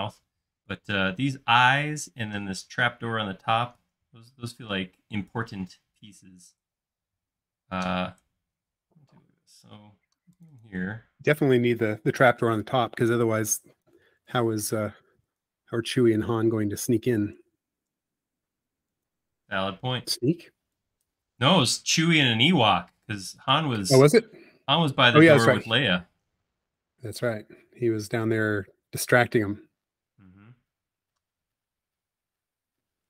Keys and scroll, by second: 15.9 Caps_Lock, 20.4 f, 23.0 l, 27.9 shift+q.